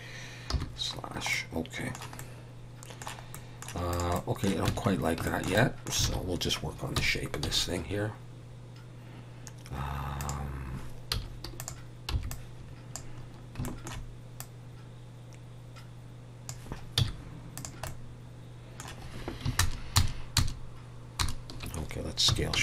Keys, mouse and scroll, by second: 0.5 /, 1.0 scroll down 2, 1.3 middle click, 2.2 middle click, 3.6 middle click, 3.9 click, 4.1 middle click, 4.6 Tab, 4.8-5.2 scroll up 3, 5.2 shift+middle click, 5.3 shift+middle click, 5.5 middle click, 6.0 alt+a, 6.9 KP_1, 7.4 x, 12.1 z, 12.1 b, 13.2-13.6 scroll up 2, 13.6 shift+middle click, 14.4 click, 16.9 z, 17.8 middle click, 19.6 ctrl+KP_Add, 21.0 ctrl+KP_Add, 21.5 ctrl+KP_Add, 22.2 s.